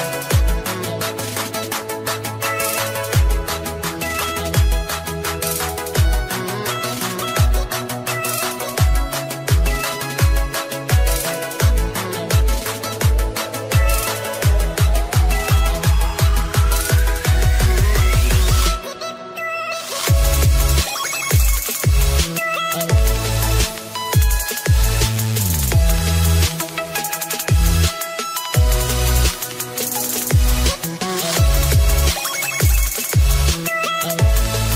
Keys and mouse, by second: 0.2 Return, 0.2 click, 0.6 Return, 1.9 Return, 2.1-6.0 typing, 6.6 click, 7.6-8.3 typing, 7.8 click, 9.9 click, 11.7 click, 12.0 d, 13.2 Return, 13.2 d, 13.5 Right, 13.9 BackSpace, 14.1 BackSpace, 14.6 BackSpace, 16.2-16.9 typing, 18.1 Return, 18.4 Right, 18.4 Return, 18.5 BackSpace, 19.1 Return, 19.1 Right, 19.1 BackSpace, 25.0 ctrl+d, 26.3 Return, 26.9 Right, 26.9 BackSpace, 27.1 BackSpace, 27.5 BackSpace, 28.7-29.9 typing, 32.9 click, 33.6-34.7 typing.